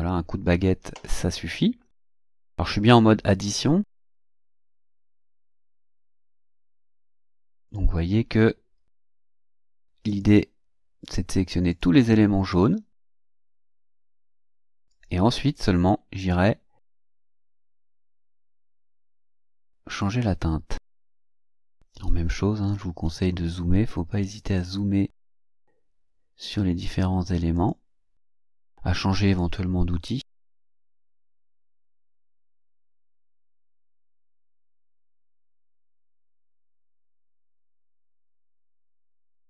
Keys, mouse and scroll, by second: 4.0 click, 5.4 click, 6.6 click, 7.6 click, 8.4 scroll down 2, 9.2 click, 10.1 click, 11.0 click, 11.7 click, 12.5 click, 13.5 click, 14.2 click, 14.9 click, 15.5 click, 16.2 click, 16.8 click, 18.1 click, 18.8 click, 20.0 click, 20.8 click, 21.4 click, 22.3-23.7 ctrl+scroll up 8, 24.4 click, 25.3 click, 26.8 click, 27.5 click, 29.3 click, 30.0 click, 34.0 click, 38.7 click.